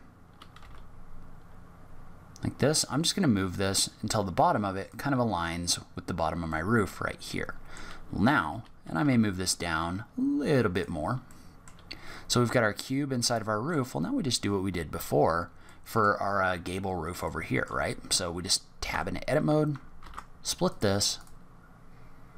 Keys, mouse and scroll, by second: 6.5 middle click, 8.4 g, 11.2 middle click, 13.3 middle click, 15.0-15.3 scroll up 2, 15.6 middle click, 17.2 middle click, 18.9 Tab, 19.9 ctrl+r.